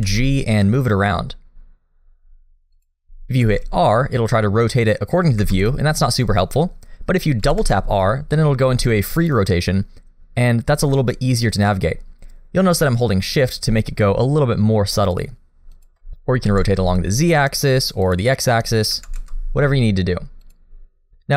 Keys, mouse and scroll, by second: 0.0 g, 3.4 r, 7.5 r, 16.5 r, 18.9 r.